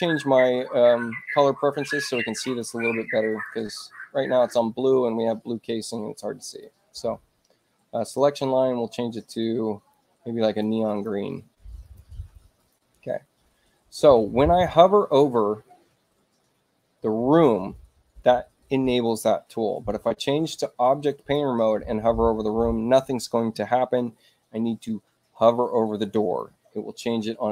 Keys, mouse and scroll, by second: 1.1 click, 2.4 click, 3.2 click, 6.4 click, 7.9 click, 9.3 click, 10.3 click, 10.8 click, 11.8 click, 12.5 click, 21.1 click.